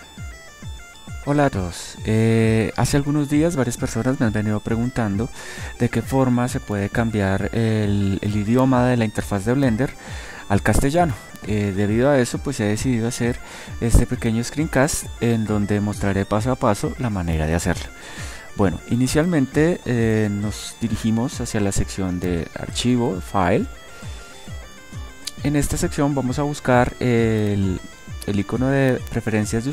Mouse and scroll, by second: 22.9-26.3 drag.